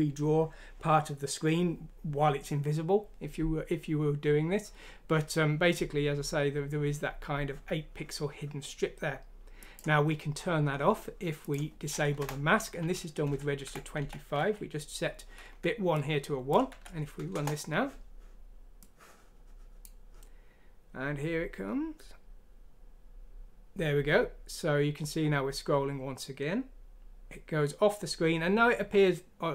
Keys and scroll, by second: 13.2 shift+Home, 13.6 Delete, 14.4 shift+;, 16.7 F6, 17.3 Return.